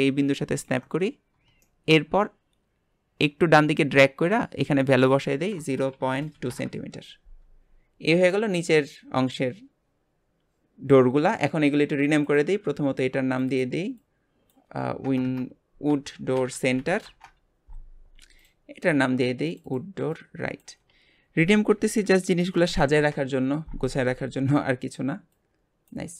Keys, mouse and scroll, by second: 1.0 scroll up 2, 1.6-3.4 shift+middle drag, 3.4 click, 5.0-7.6 drag, 7.6 scroll down 3, 8.3-11.3 shift+middle drag, 12.3-13.4 drag, 13.5-15.2 drag, 15.2 BackSpace, 18.4 click, 19.4 click, 19.6-22.9 drag, 25.3 click.